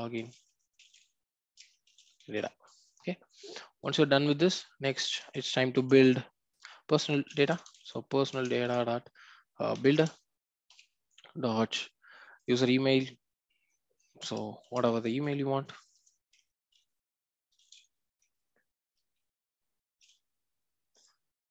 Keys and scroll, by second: 8.3 Return, 11.9 Return.